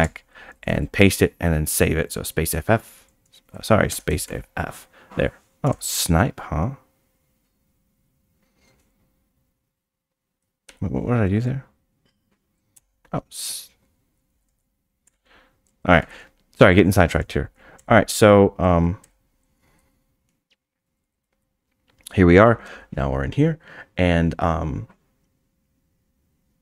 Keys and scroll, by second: 0.0 p, 0.6 f, 3.5 Escape, 4.3 s, 12.7 f, 16.0 f, 17.8 f, 19.8 Escape, 21.0 Escape, 21.1 Escape, 21.2 Escape.